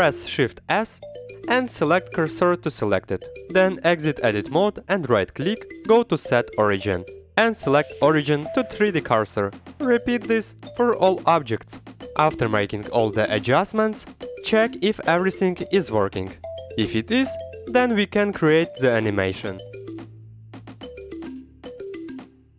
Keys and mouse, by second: 0.2 shift+s, 4.8 click, 5.2 Tab, 7.2-11.3 drag, 11.9-14.4 typing, 12.5 drag, 12.5 right drag, 13.2 Escape, 16.1 Escape, 16.4 shift+middle click, 17.3 shift+middle click, 17.6 middle click, 17.8 click, 17.8-19.1 typing, 18.3 Escape, 18.8 Escape, 19.7 Escape, 20.1 t, 20.3 y, 20.4 r, 20.5 y, 21.3 Escape, 21.6 click.